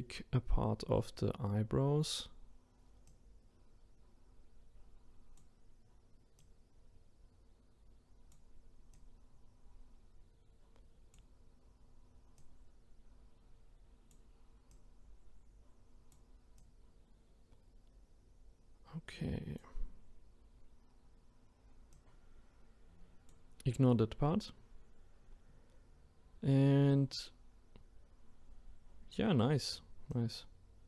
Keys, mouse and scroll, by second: 21.9-30.8 drag.